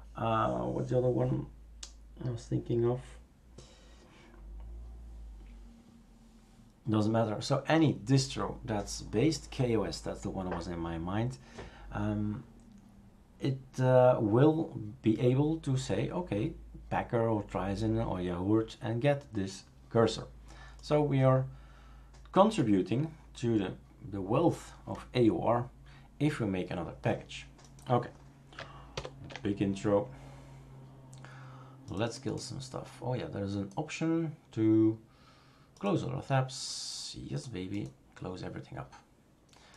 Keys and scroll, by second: 28.9 ctrl+alt+f.